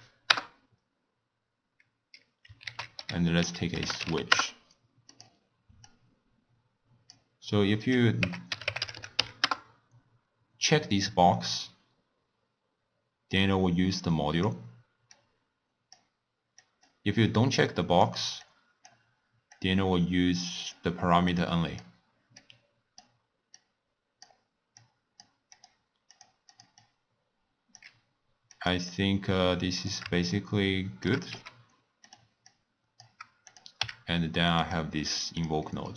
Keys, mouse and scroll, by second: 2.6 ctrl+a, 5.8 drag, 7.8-8.9 drag, 8.9 o, 13.3 drag, 15.1 click, 16.5 click, 17.7 click, 18.4 click, 19.5 click, 21.3 click, 22.3-24.8 drag, 25.5 click, 26.1 click, 26.5 drag, 26.8-28.7 drag, 28.8-30.3 drag, 30.3 shift+right click, 31.3 g, 32.5 click, 33.5 click, 33.8 w, 35.7-35.9 middle drag.